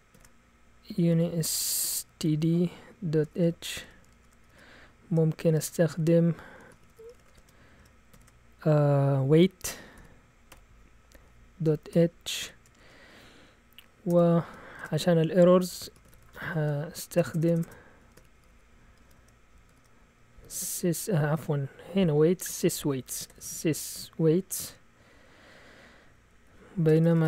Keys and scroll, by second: 0.0-8.1 typing, 9.5-24.7 typing, 25.8-27.2 typing.